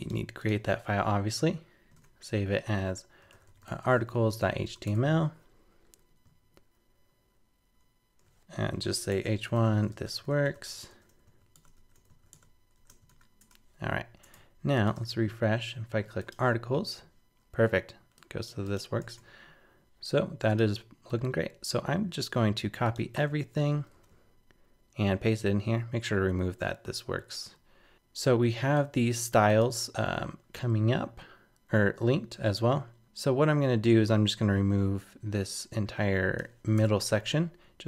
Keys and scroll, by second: 13.4 super+Tab, 14.9 super+r, 19.0 super+Tab, 21.9 super+a, 22.4 super+c, 23.2 super+v.